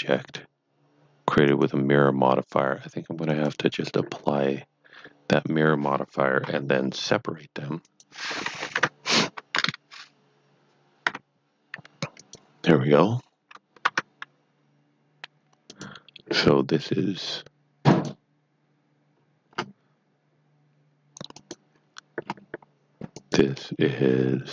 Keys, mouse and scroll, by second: 6.4 p, 7.8 click, 8.7 Tab, 11.0 p, 12.2 click, 13.8 Tab, 15.6 click, 17.9 click, 18.0 click, 19.1 scroll down 1, 19.7-20.3 scroll up 2, 21.3 click, 22.2-23.1 scroll up 2, 23.1 click.